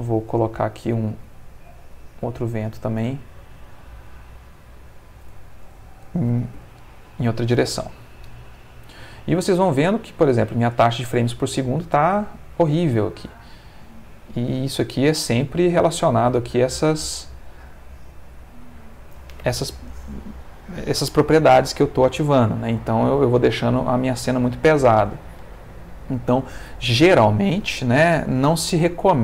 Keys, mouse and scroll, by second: 0.7 click, 1.1 r, 3.0 click, 4.4 click, 6.3 3, 6.5 0, 7.6 Return, 11.7 Escape, 14.6 click, 15.1 space, 15.9-17.4 ctrl+middle drag.